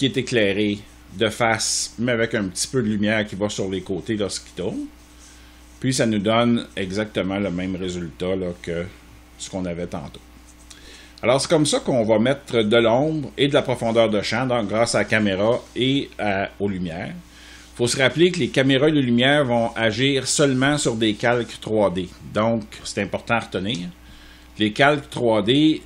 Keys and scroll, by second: 23.4 space.